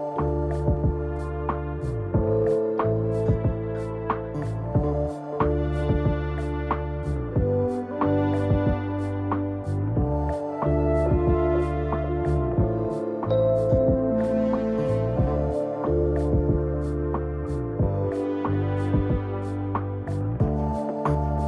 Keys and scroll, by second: 1.5 ctrl+i, 9.1 ctrl+z, 15.1 ctrl+z.